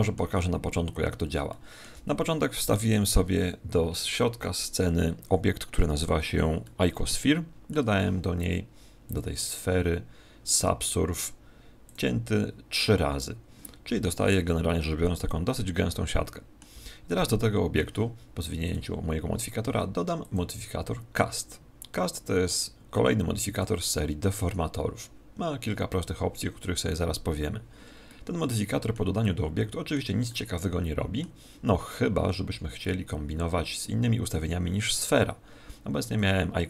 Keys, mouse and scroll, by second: 2.7 right click, 6.6-8.4 middle drag, 9.0 click, 11.8 click, 13.9 z, 14.2-16.7 middle drag, 16.7 z, 17.3-19.0 middle drag, 18.6-22.1 drag, 28.0-31.9 middle drag, 36.1-36.6 middle drag.